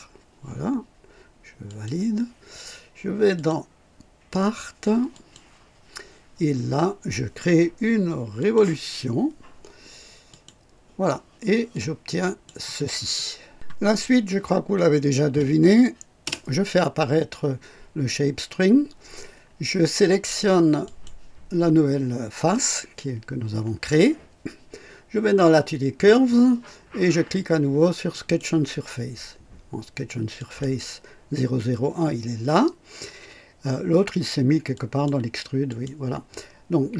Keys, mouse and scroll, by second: 1.6 click, 2.3-3.0 typing, 3.3 click, 5.1 click, 5.8-6.6 typing, 8.3 click, 10.2 click, 11.7-12.6 drag, 16.1 space, 20.8 click, 28.0 click, 30.3 click, 34.7 click, 35.6 click.